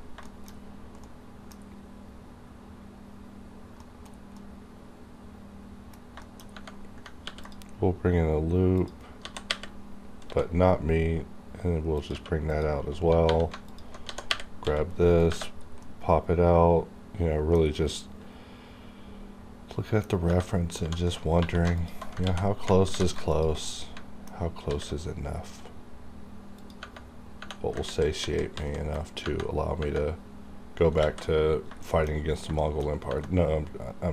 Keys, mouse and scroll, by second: 0.0 scroll down 1, 0.2-6.2 shift+middle drag, 6.2 shift+middle click, 6.5-7.0 shift+scroll up 2, 7.2 ctrl+r, 7.4 ctrl+click, 9.1 g, 12.0 click, 12.0 q, 12.5 click, 12.5 click, 13.3 3, 13.7 alt+click, 14.0 g, 15.1 click, 15.2 click, 15.6 scroll down 2, 15.8-17.6 middle drag, 17.6 scroll down 2, 17.9 middle click, 20.1 scroll up 1, 20.4 middle click, 20.8-22.9 typing, 21.8 alt+click, 23.3 alt+click, 23.6 alt+scroll down 2, 23.6 middle click, 24.7 alt+s, 26.5 click, 26.6 click, 27.9 ctrl+z, 29.2 Tab, 31.0 alt+a, 31.5 scroll down 1, 31.8 shift+middle click, 32.2 scroll up 1, 32.6 shift+middle click, 33.2 middle click.